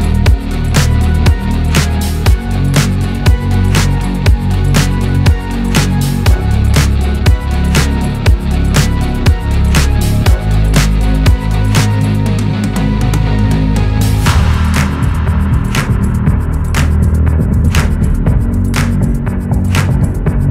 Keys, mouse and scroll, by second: 0.2 click, 2.7 click, 3.1 click, 3.5 shift+click, 3.9 shift+click, 4.1 middle click, 4.7 shift+click, 5.1 shift+click, 5.5 shift+click, 5.8 shift+click, 6.0 shift+middle click, 6.2-6.6 scroll up 2, 6.6 shift+click, 6.8 shift+click, 7.2 shift+click, 7.4 scroll down 1, 7.6 shift+middle click, 8.1 ctrl+KP_Add, 8.5 ctrl+KP_Add, 9.0 scroll down 1, 9.2-10.8 shift+middle drag, 10.8-11.5 drag, 11.5 Tab, 11.8 scroll down 1, 12.0-12.4 middle drag, 12.4-14.0 drag, 14.5-15.1 middle drag, 15.1 scroll up 1, 15.3-15.8 middle drag, 15.8 scroll down 1, 16.0-16.6 middle drag, 16.6-17.0 scroll up 1, 17.0-17.4 middle drag, 17.4-18.0 scroll up 1, 18.0-20.1 drag, 20.1 scroll down 3, 20.3-20.5 middle drag.